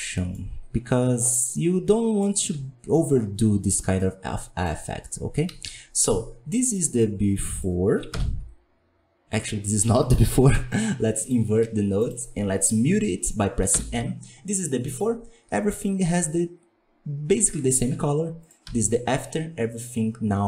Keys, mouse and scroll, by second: 1.4-2.3 middle drag, 2.3 alt+a, 3.1-3.9 scroll down 1, 3.9-5.4 middle drag, 5.4 KP_1, 5.6 KP_5, 7.5 click, 8.1 m, 9.8 m, 11.2 click, 11.9 click, 13.7 m, 14.0-14.4 scroll down 2, 14.4-16.2 scroll up 1, 18.4 click, 18.6 m.